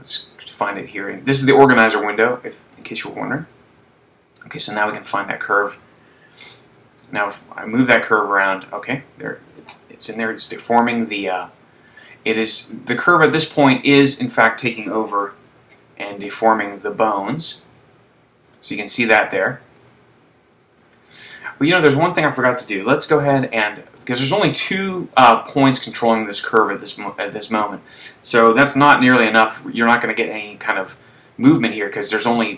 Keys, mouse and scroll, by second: 2.9 click, 6.7 r, 9.9 click, 10.8 super+z, 13.4 Tab, 15.4 z, 16.5 right click, 17.6 click, 20.5 super+z.